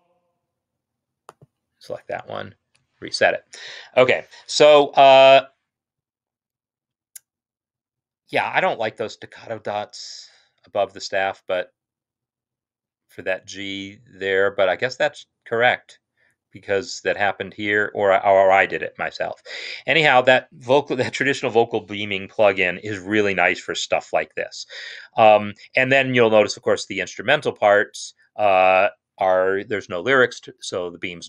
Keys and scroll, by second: 2.4 ctrl+r.